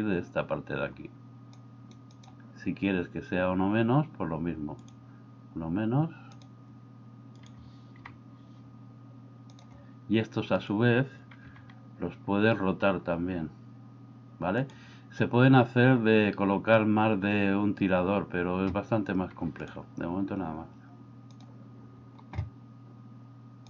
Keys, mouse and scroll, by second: 1.7 click, 2.1 click, 6.3 click, 8.1 g, 11.5 r.